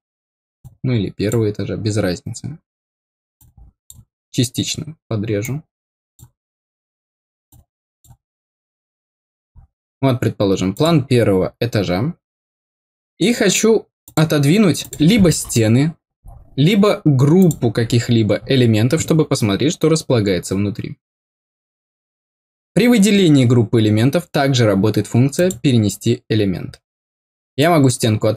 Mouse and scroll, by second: 0.5 click, 3.3 click, 5.3 click, 7.4 click, 9.4 scroll up 1, 10.7 click, 14.0 click, 14.7 click, 17.3 click, 25.3 click, 27.5 click.